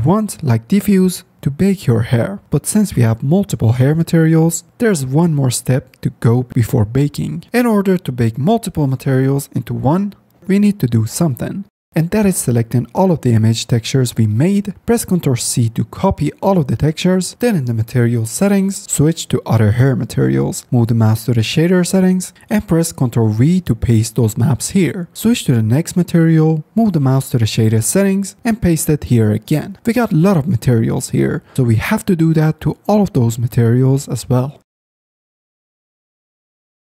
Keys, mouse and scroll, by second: 6.3-7.9 drag, 9.1 middle click, 12.1 middle click, 13.0 middle drag, 13.6-14.6 drag, 15.6 ctrl+c, 22.0 click, 23.2 ctrl+v, 27.0 click, 34.1 middle click, 35.6 ctrl+v.